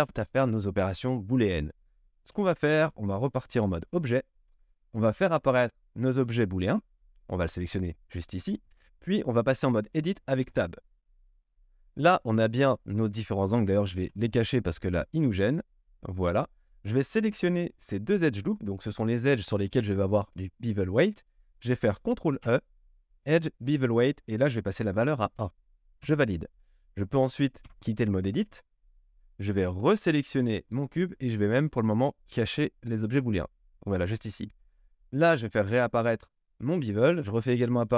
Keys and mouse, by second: 2.3 Tab, 5.6 click, 6.1-14.0 middle drag, 10.4 Tab, 14.0 q, 16.9 alt+click, 22.3 ctrl+e, 27.6 Tab, 29.9-33.4 drag, 33.4-36.3 middle drag, 36.3 click, 36.5-37.9 middle drag, 37.2 q.